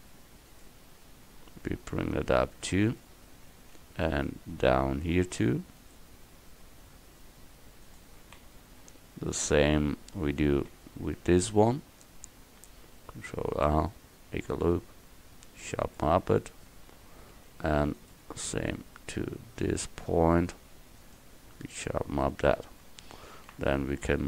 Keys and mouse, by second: 3.8 ctrl+r, 13.2 ctrl+r, 17.2 ctrl+r, 23.4 ctrl+r.